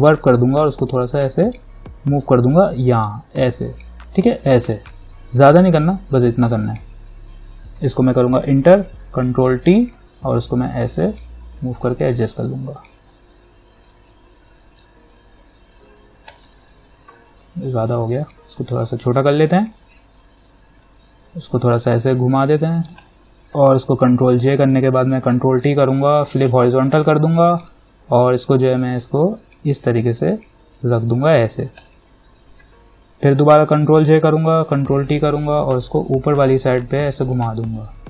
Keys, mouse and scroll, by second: 0.2-8.6 drag, 8.6 Return, 9.7 ctrl+t, 10.1-16.5 drag, 17.6 ctrl+t, 18.9-23.2 alt+drag, 24.4 ctrl+j, 25.4 ctrl+t, 25.7 right click, 26.7-32.0 drag, 33.9 ctrl+j, 34.7 ctrl+t, 35.6-38.0 drag.